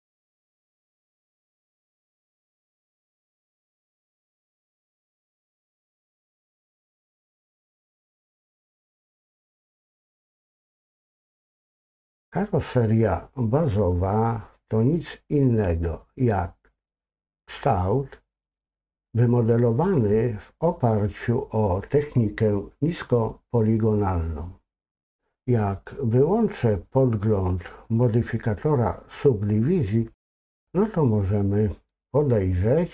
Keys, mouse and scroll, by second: 0.0 click, 0.7 click, 2.1 click, 4.2 click, 7.7 click, 10.2 click, 25.0 click.